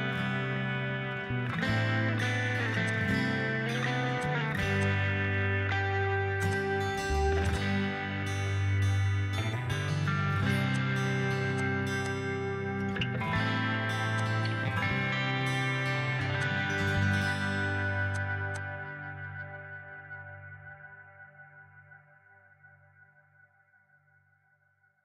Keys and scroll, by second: 6.6 4, 8.3 typing, 8.5 Return, 12.5-12.8 typing, 13.1 Return, 20.8 s.